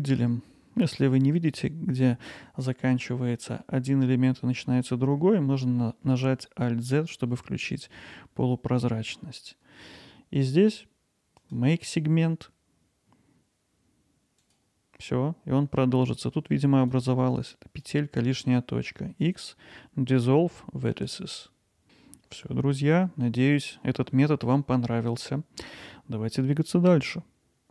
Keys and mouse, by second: 6.2 alt+z, 21.8 Tab, 24.4-25.7 middle drag.